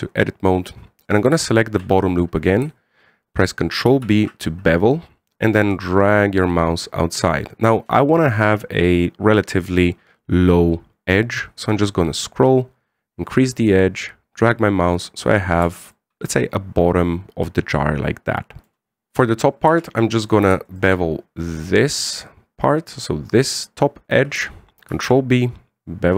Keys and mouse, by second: 0.2 Tab, 1.8 right click, 2.2 alt+shift+right click, 4.6 ctrl+b, 16.4 Tab, 16.7-19.1 middle drag, 19.1 KP_1, 19.5 shift+middle drag, 20.5 Tab, 21.0 right click, 25.7 ctrl+b.